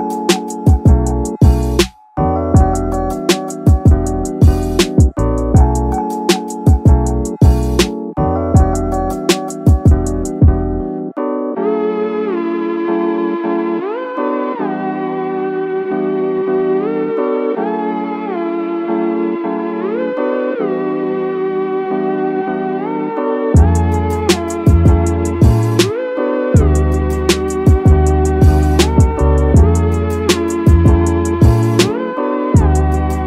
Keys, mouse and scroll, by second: 1.5 click, 2.3 scroll up 1, 2.4 middle drag, 2.8 middle click, 3.1 click, 3.4 middle click, 3.6 scroll up 1, 4.1-6.4 drag, 7.8 click, 9.0 Tab, 9.3 middle click, 10.2 middle click, 11.0 middle click, 11.7 middle click, 13.8 ctrl+r, 16.6 click, 17.6 ctrl+e, 19.1 ctrl+r, 21.8 click, 22.0-22.3 scroll down 2, 22.3 middle click, 22.9 middle click, 23.7 KP_1, 24.6 shift+middle click, 27.4 Tab, 27.8-28.2 scroll down 2, 28.2 scroll up 1, 28.7 click, 29.9 shift+a.